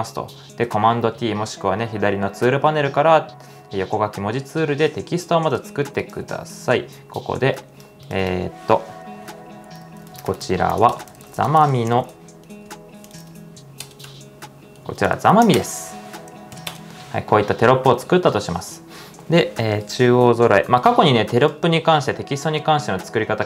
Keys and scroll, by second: 0.7 super+t, 9.2-17.2 typing, 19.0-19.7 typing.